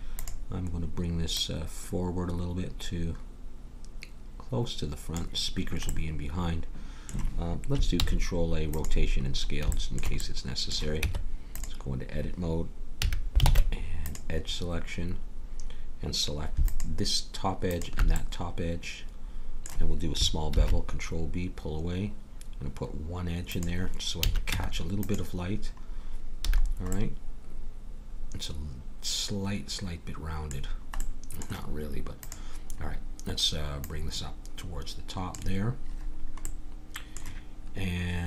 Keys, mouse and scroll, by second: 5.9-7.9 middle drag, 7.9 ctrl+a, 9.4 middle click, 11.0 Tab, 12.9 a, 13.4 ctrl+Tab, 16.6-20.5 drag, 18.2-19.3 middle drag, 20.5 ctrl+b, 24.2 a, 24.5 Tab, 26.5 a, 30.7-32.2 middle drag, 32.2-35.7 drag, 36.4-38.2 middle drag.